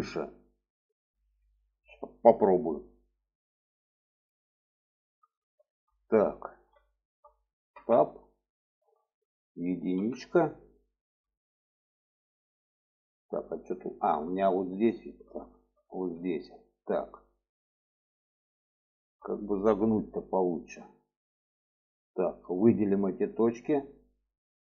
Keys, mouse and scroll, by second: 4.2 middle drag, 4.9-5.6 middle drag, 6.0 alt+middle click, 6.7 shift+middle click, 7.5 Tab, 8.4 shift+middle click, 9.8 1, 10.6 shift+middle click, 13.7 shift+middle click, 14.5 shift+middle click, 15.2 shift+middle click, 16.0 shift+middle click, 18.7 shift+middle click, 22.5 click.